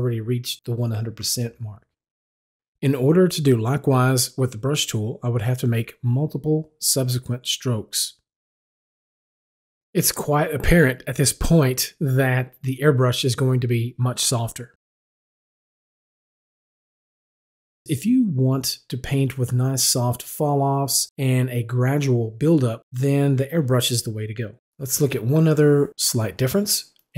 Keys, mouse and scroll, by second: 5.6 click, 8.2 click, 9.0 double click, 9.3 click, 9.9 double click, 10.1 click, 10.3 click, 10.5 double click, 10.8 click, 11.3 double click, 11.5 click, 11.7 click, 13.6 click, 14.5 double click, 14.7 click, 15.0 click, 15.2 double click, 15.5 click, 15.6 click, 15.9 double click, 16.1 click, 16.3-18.5 drag.